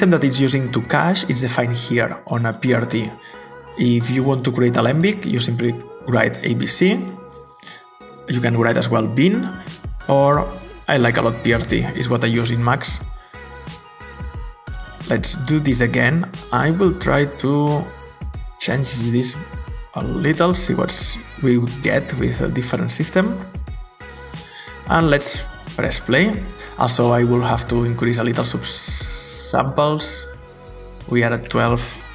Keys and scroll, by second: 4.7-5.9 typing, 8.5-11.2 typing, 11.4 Return, 26.5 Return, 26.5 typing.